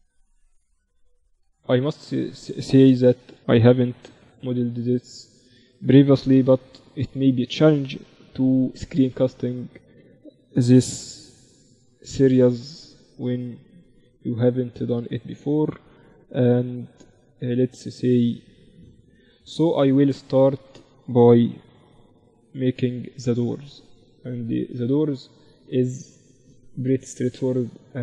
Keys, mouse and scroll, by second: 1.1 Tab, 2.1 z, 2.7 z, 2.9 a, 3.9 b, 6.4 ctrl+r, 7.5 a, 8.5 b, 10.1 a, 11.0 b, 12.1-14.0 drag, 15.3 a, 16.4 b, 18.5-20.3 drag, 20.7 a, 21.7 b, 23.5-24.7 drag, 24.5 KP_1.